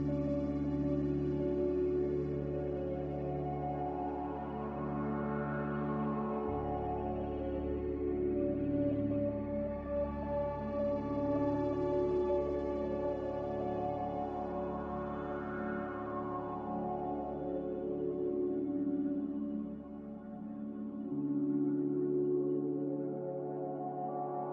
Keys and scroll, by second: 7.8 z, 9.7 5, 9.9 Return, 12.3 5, 12.5 Return, 15.0 5, 17.0 5, 21.3 ctrl+z, 22.0 ctrl+z.